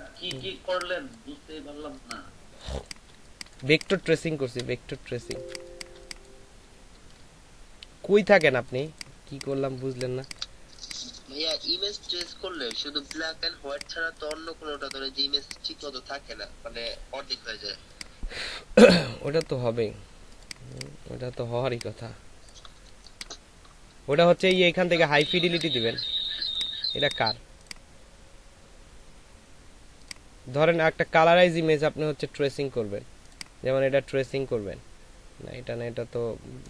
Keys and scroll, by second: 3.0 shift+space, 4.0 ctrl+shift+space, 4.4 v, 5.0 s, 8.8 shift+space, 10.1 space, 21.6 ctrl+space, 24.8 ctrl+space, 25.0 typing, 26.4-27.6 typing.